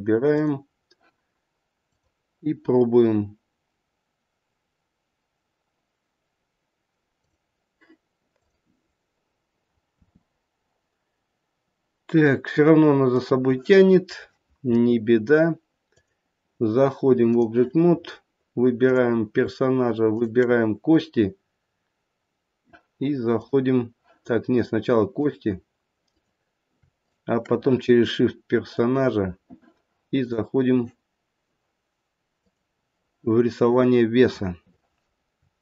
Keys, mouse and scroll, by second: 0.3 click, 1.9 click, 8.3 click, 10.0 r, 15.8 click, 18.8 click, 20.0 shift+click, 20.5 shift+click, 25.1 click, 26.0 click, 26.9 shift+click, 27.3 shift+click.